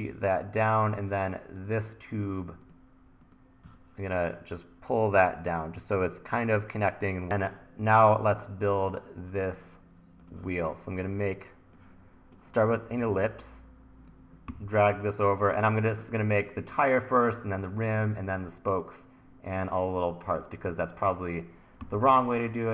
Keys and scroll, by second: 3.7 e, 7.2 Return, 14.5 t, 18.2 e, 21.9 t.